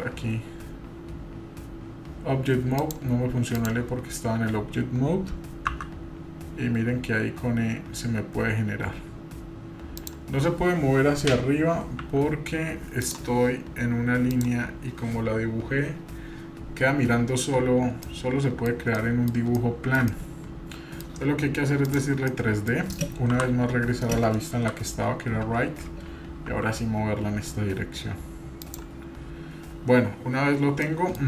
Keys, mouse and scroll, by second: 2.8-3.7 drag, 5.7 e, 14.3 click, 18.1 middle click, 18.7 scroll down 2, 18.9 middle click, 19.6 shift+middle click, 20.1 middle click, 21.8 click, 22.3 middle click, 23.3 KP_1, 24.6 KP_3, 25.2 scroll up 2, 26.5 g, 30.8-31.2 middle drag.